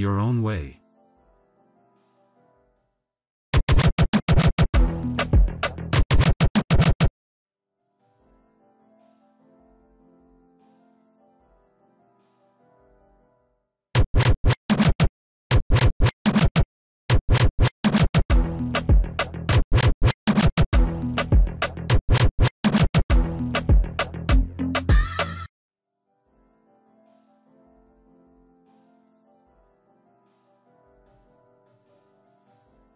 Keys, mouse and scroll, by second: 2.1 click, 3.5 click, 8.5 BackSpace, 9.7 ctrl+v, 11.8 click, 12.3 click, 13.8 click, 15.4 click, 17.0 click, 17.6 click, 18.6 click, 19.4 click, 25.4 c, 29.0 click, 30.7 BackSpace, 31.7 ctrl+v, 32.2 click.